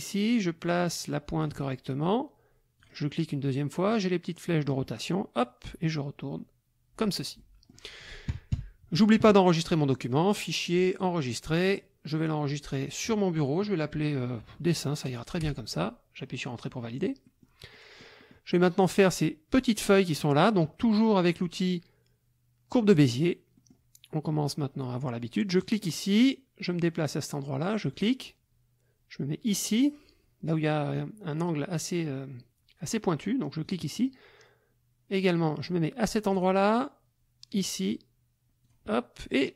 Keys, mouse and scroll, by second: 2.8 click, 4.7-7.2 drag, 7.4 click, 8.3 KP_Subtract, 10.1 click, 11.0 click, 15.4 Return, 17.2 click, 17.7 click, 19.6 click, 22.9 click, 23.5 click, 25.6 click, 27.9 click, 33.7 click, 36.4 click, 37.5 click, 38.6 click.